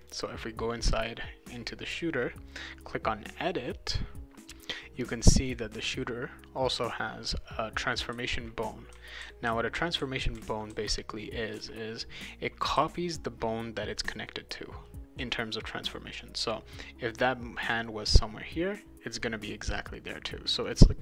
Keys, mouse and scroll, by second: 0.0 click, 2.5 click, 5.5 click, 6.6 click, 7.8-13.1 right drag, 8.1-11.6 typing, 12.7 w, 20.6 click.